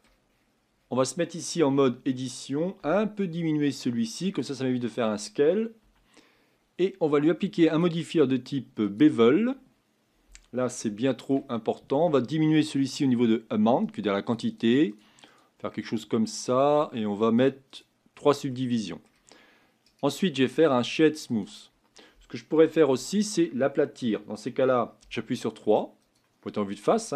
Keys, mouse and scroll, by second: 0.3-1.2 scroll up 9, 1.2-1.6 scroll down 1, 1.6 Tab, 2.8 s, 5.8 Tab, 8.9 click, 9.4-10.8 scroll up 6, 10.8-13.9 shift+middle drag, 13.9-18.5 drag, 18.5-21.4 middle drag, 21.4-22.9 right drag, 22.9 Tab, 25.0 3, 26.1 click.